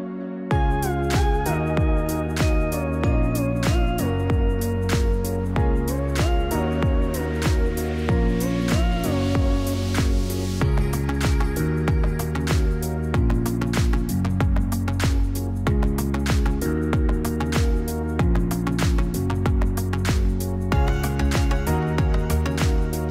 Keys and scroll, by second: 8.3-10.1 typing, 13.3 Delete.